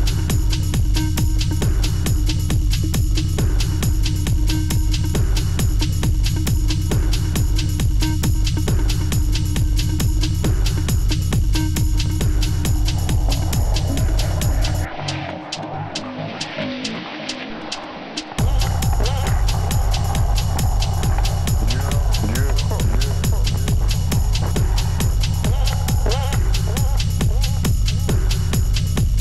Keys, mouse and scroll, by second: 1.3 Return, 1.5 Return, 2.3 shift+click, 2.7 shift+click, 3.0 Return, 4.3 double click, 4.6 double click, 5.4-5.9 scroll down 1, 9.3 alt+Tab, 12.2 Return, 12.9 t, 17.5 double click, 17.6 double click, 17.8 double click, 18.4-22.1 typing, 24.4 Return, 25.2 ctrl+click, 25.5 ctrl+click, 27.6 Return.